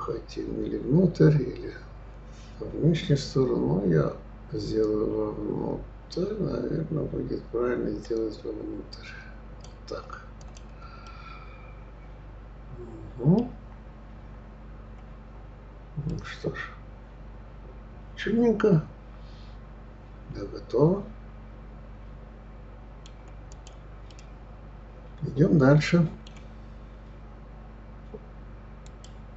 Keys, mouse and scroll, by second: 10.4 click, 11.0-13.6 middle drag, 13.6-14.1 scroll down 1, 14.1 scroll up 2, 14.7-15.1 scroll up 2, 15.5-16.1 scroll down 2, 16.1-19.2 middle drag, 23.5 click, 24.1-27.1 middle drag.